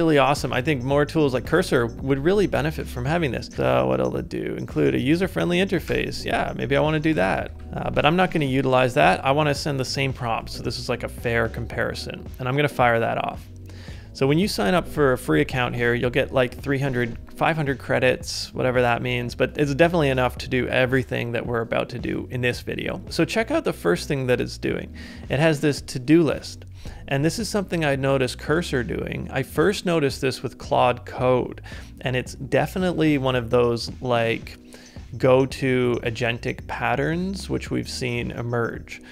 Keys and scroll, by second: 7.5 ctrl+c, 7.6 BackSpace.